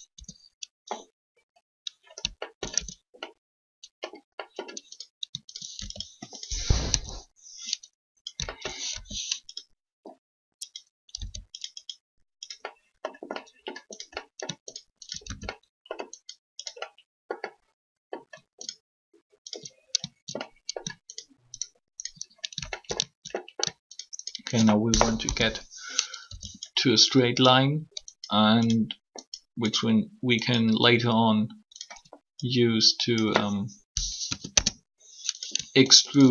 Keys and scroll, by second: 1.2 Tab, 2.7 shift+Tab, 6.8 shift+3, 11.2 s, 25.2 shift+3, 26.2 e, 34.2 ctrl+Delete, 34.3 Return.